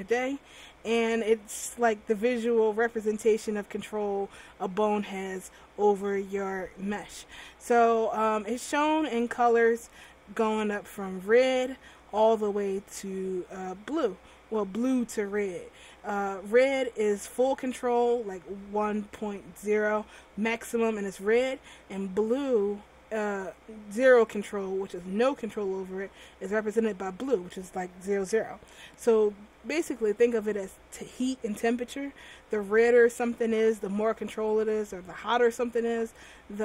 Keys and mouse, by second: 0.1 alt+r.